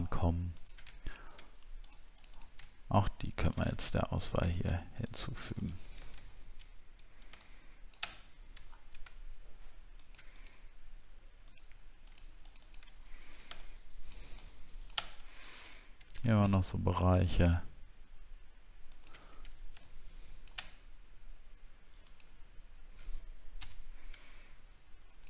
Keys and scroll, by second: 6.3 alt+scroll down 1, 8.6 alt+scroll up 1, 13.0 alt+scroll down 1, 15.8 alt+scroll up 1.